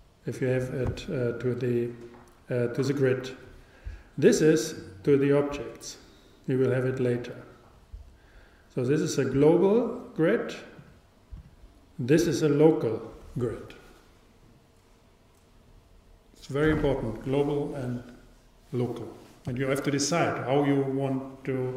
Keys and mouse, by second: 8.9-10.7 drag, 11.4-13.3 drag.